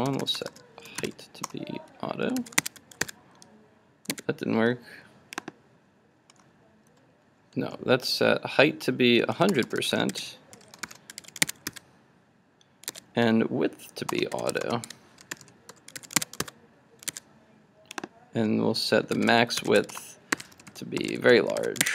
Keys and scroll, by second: 2.4 super+s, 2.7 super+Tab, 3.1 super+r, 4.3 super+Tab, 11.2 super+s, 11.6 super+Tab, 11.7 super+r, 13.0 super+Tab, 16.1 super+s, 16.3 super+Tab, 16.4 super+r, 17.2 super+Tab, 21.6 super+s.